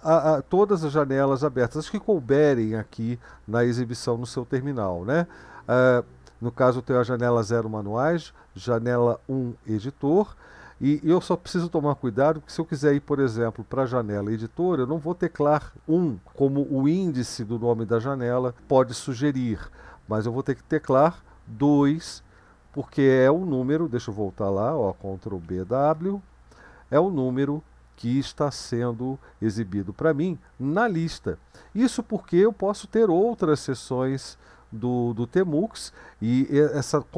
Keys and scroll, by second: 21.7 2, 25.5 ctrl+b, 25.9 w.